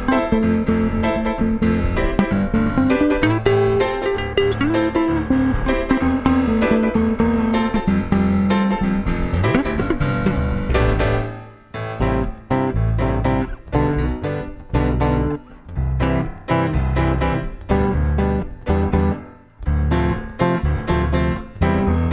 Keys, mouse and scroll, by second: 7.0-9.5 middle drag, 9.5-12.1 drag, 12.1 middle click, 12.3 middle click, 12.9-16.1 drag, 14.6 Tab.